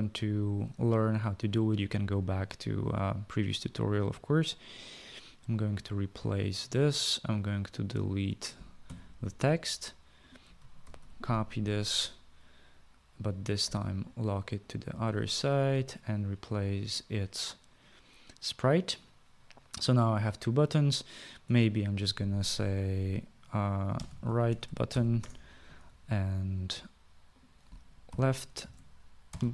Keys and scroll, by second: 9.0 Delete, 11.0 ctrl+c, 11.2 ctrl+v, 23.9-25.6 typing, 28.3-29.5 typing.